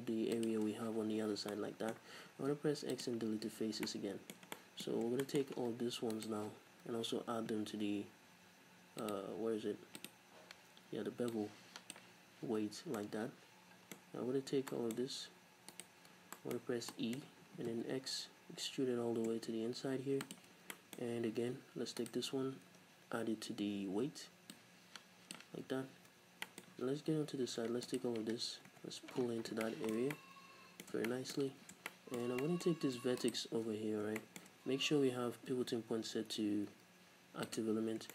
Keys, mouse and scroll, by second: 0.6 shift+click, 1.2-1.6 scroll down 2, 1.6 middle click, 2.2 x, 3.5 z, 3.9-6.2 middle drag, 5.0-5.3 scroll up 2, 6.2 alt+right click, 6.9 n, 9.1 click, 10.0 click, 11.4-13.0 drag, 12.5 n, 12.8 scroll down 2, 13.0-15.8 middle drag, 14.1-14.8 scroll up 2, 15.8 alt+right click, 16.2 scroll down 2, 16.4-20.4 middle drag, 16.6-17.0 scroll up 2, 17.6 e, 20.4 shift+click, 20.6 scroll down 1, 20.8-22.1 middle drag, 21.3-21.6 scroll up 1, 22.1 alt+right click, 22.7 n, 24.6-26.5 drag, 25.6-26.0 scroll down 2, 26.0 n, 26.5-27.9 middle drag, 27.0-27.6 scroll up 2, 27.6-27.9 scroll up 1, 27.9 alt+right click, 28.7 KP_Decimal, 29.3 scroll up 1, 29.7-33.3 shift+middle drag, 31.5-31.9 scroll up 2, 33.3 shift+right click, 34.3-38.1 shift+middle drag, 35.7 ..